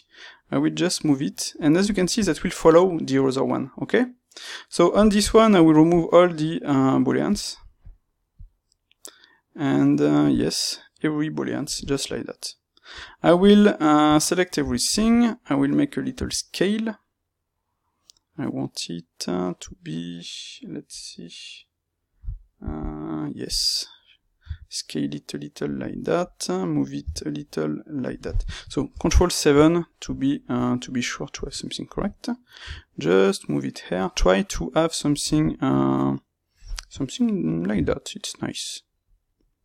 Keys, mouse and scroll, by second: 1.6 click, 1.8-5.8 middle drag, 5.8-11.0 drag, 12.8 Tab, 14.0 a, 15.2 middle click, 16.1 s, 21.0 click, 23.6 middle click, 24.4 s, 25.7 click, 25.8-27.0 middle drag, 27.0 g, 28.1 click, 28.8 ctrl+KP_7, 29.6-34.0 shift+middle drag, 32.5 g, 34.0 click, 37.7-39.2 middle drag, 37.7 g, 39.2 click, 39.5-39.6 middle drag.